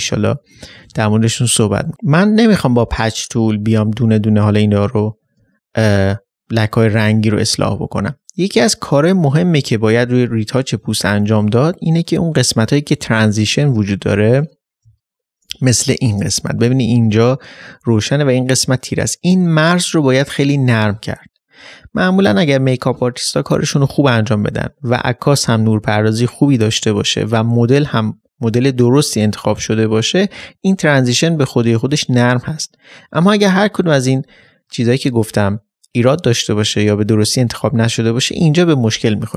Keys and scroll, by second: 14.8 ctrl+d, 14.9 ctrl+space.